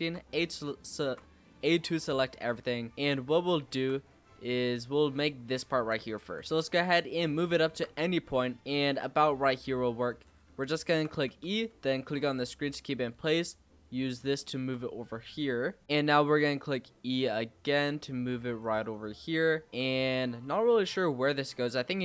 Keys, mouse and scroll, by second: 0.6 shift+middle click, 1.1-1.9 scroll down 2, 1.9-2.4 scroll down 3, 2.4-4.0 shift+middle drag, 4.0-5.5 scroll up 4, 5.5 shift+middle click, 6.2 g, 7.3 shift+middle click, 7.9 scroll up 3, 8.4 shift+middle click, 8.9 g, 10.3-10.6 scroll down 4, 10.6 shift+middle click, 11.2 e, 12.0 click, 14.3 shift+middle click, 14.7-15.4 scroll up 5, 15.4 shift+middle click, 15.8-16.3 scroll up 1, 16.3 e, 21.3 shift+middle click, 21.9 g.